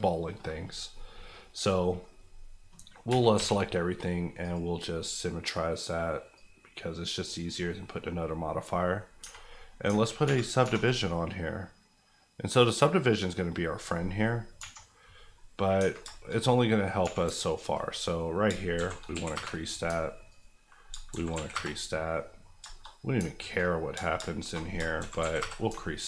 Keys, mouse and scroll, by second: 1.2 middle click, 2.4 scroll down 1, 2.7 middle click, 2.9 scroll down 1, 3.1 Tab, 3.3 a, 4.5 click, 6.6 click, 7.5 scroll up 1, 7.7 middle click, 8.1 scroll up 1, 8.6 middle click, 9.2 Tab, 9.5 middle click, 10.2 ctrl+1, 10.6 ctrl+2, 11.0-13.5 middle drag, 15.3 middle click, 15.6 scroll up 1, 15.8 Tab, 16.2 shift+middle click, 16.3 shift+scroll up 1, 16.5 middle click, 17.0 2, 17.4 alt+click, 17.8 click, 17.9 middle click, 18.4 shift+middle click, 18.7 shift+e, 19.1 KP_1, 19.3 KP_Enter, 19.8 alt+KP_Enter, 20.3 alt+click, 20.8 click, 20.9 shift+click, 21.1 shift+e, 21.3 KP_1, 21.5 KP_Enter, 22.1 middle click, 22.6 shift+middle click, 22.8-23.4 shift+scroll up 3, 23.4 alt+click, 23.9 alt+shift+click, 24.6 shift+click, 24.7 click, 24.9 shift+e, 25.2 KP_1, 25.4 KP_Enter.